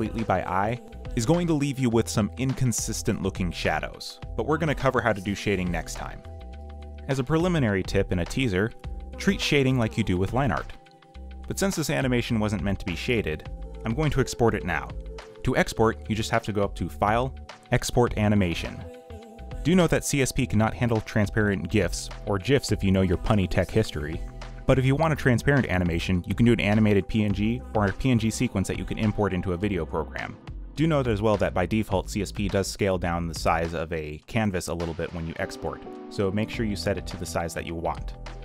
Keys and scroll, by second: 1.0 q, 1.2 g, 7.5 ctrl+c, 9.3 ctrl+v, 9.8 ctrl+v, 30.6 1, 31.7-32.7 typing.